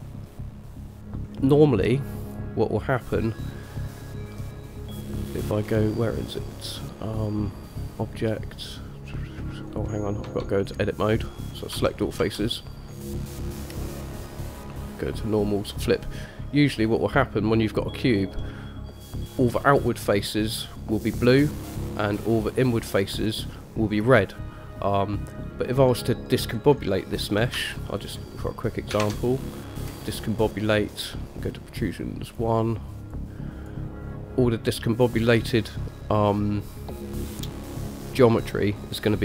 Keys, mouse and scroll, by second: 2.4-9.9 drag, 10.5 Tab, 11.9 a, 12.4 a, 14.0-15.9 drag, 16.4-18.4 middle drag, 18.6 middle click, 20.7 middle click, 21.7 middle click, 24.2-26.0 middle drag, 27.9 shift+middle click, 28.5 middle click, 29.2 shift+a.